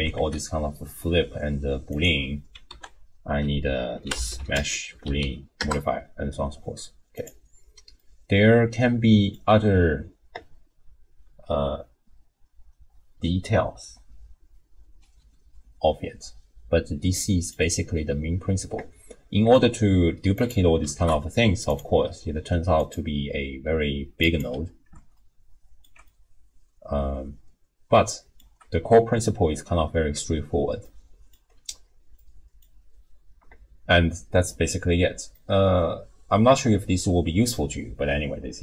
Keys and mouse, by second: 2.7 ctrl+a, 5.2 o, 8.0 middle click, 8.5 click, 17.1 middle click, 17.4 click, 17.4 right click, 20.3 click, 20.9 ctrl+shift+d, 22.9 click, 25.2 ctrl+click, 26.1-28.4 middle drag, 30.9 click, 32.2 middle click, 35.3-38.6 middle drag.